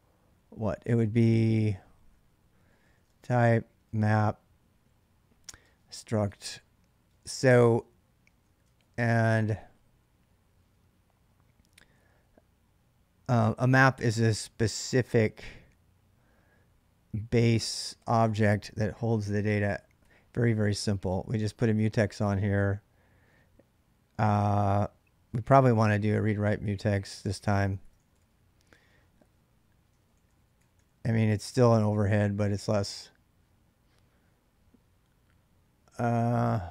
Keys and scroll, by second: 2.4-8.6 typing, 7.4 Return, 14.1 ctrl+[, 14.2 ctrl+j, 19.6-21.0 typing, 21.1 Tab, 26.3-32.4 typing.